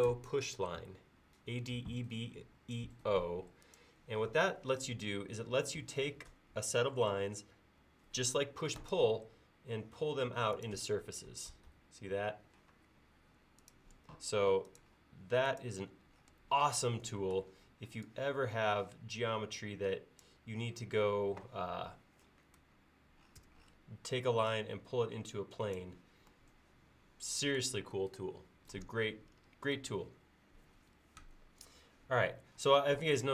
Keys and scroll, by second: 12.8 space, 23.5 m.